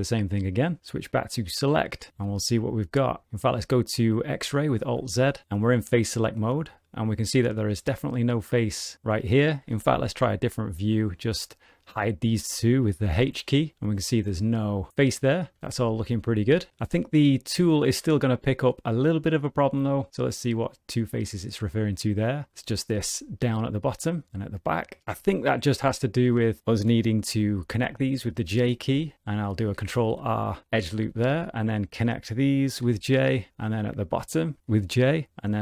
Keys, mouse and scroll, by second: 0.1 click, 1.1 click, 1.8 middle click, 2.1 g, 4.8 alt+z, 5.9 middle click, 9.7 alt+z, 10.0 middle click, 10.6 click, 11.0 middle click, 11.7 shift+click, 13.2 h, 13.7 middle click, 15.2 middle click, 15.6 ctrl+z, 16.2 middle click, 17.8 click, 20.3 click, 21.2 middle click, 23.0 middle click, 24.8 middle click, 25.0 middle click, 25.7 1, 26.1 click, 26.4 shift+click, 27.2 j, 28.7 click, 29.1 middle click, 29.7 ctrl+r, 31.0 1, 31.2 click, 31.7 shift+click, 32.8 j, 32.9 middle click, 34.3 click, 34.6 shift+click, 34.6 j.